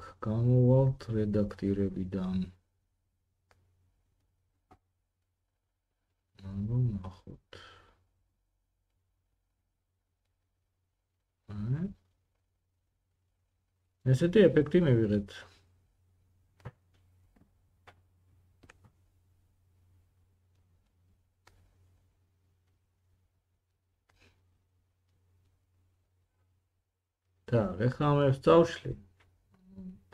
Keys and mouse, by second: 8.5-11.8 drag, 8.7 Tab, 11.8-30.1 middle drag.